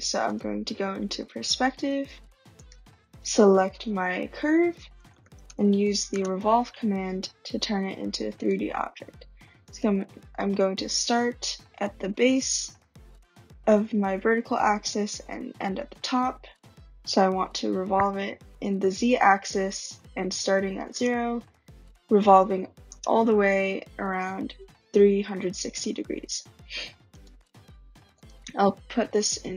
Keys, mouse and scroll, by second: 0.1 click, 0.2 click, 1.2 scroll, 1.9 scroll, 2.5 click, 3.3 click, 4.9-6.3 typing, 5.3 scroll, 7.3 typing, 8.4 click, 9.7 click, 20.8 Return, 22.7 Return, 27.1 right click, 28.2 click.